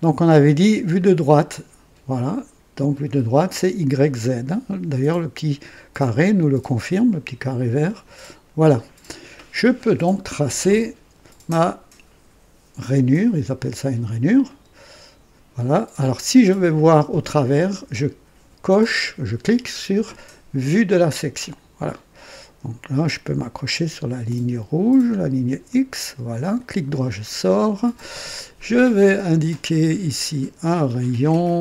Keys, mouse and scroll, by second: 0.9 click, 7.9 click, 9.1 scroll up 1, 9.8-10.4 right drag, 14.4 click, 20.9 click, 23.5 click, 25.6 click, 26.5 right click, 27.2 scroll up 1, 29.1 click, 30.8 click.